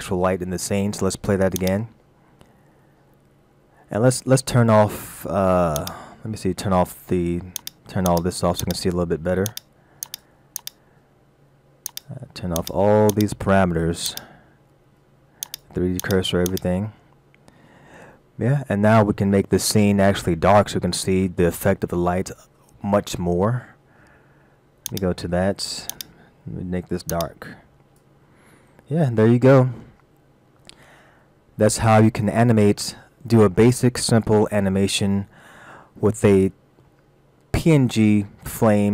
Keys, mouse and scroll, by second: 1.6 click, 5.8 click, 18.4-18.7 scroll down 1, 24.9 click, 26.0 click, 28.8-31.3 scroll down 2, 31.3 scroll down 3, 35.9-36.5 scroll up 1, 36.5 middle click, 37.3-38.7 scroll up 2.